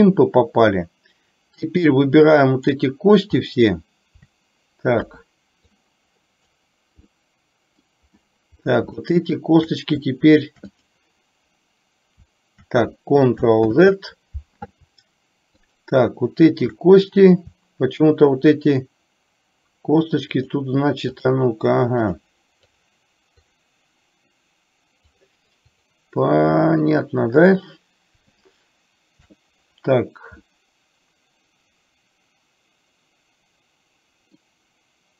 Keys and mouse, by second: 1.7-2.8 drag, 3.6 middle click, 5.0 KP_1, 5.8 click, 7.2 middle click, 9.0 shift+middle click, 10.8 click, 13.7 ctrl+z, 15.7 shift+click, 20.5 shift+click, 21.1 shift+click, 23.6 shift+click, 25.2 shift+click, 25.8 shift+click, 28.5 shift+click, 30.6-34.5 middle drag.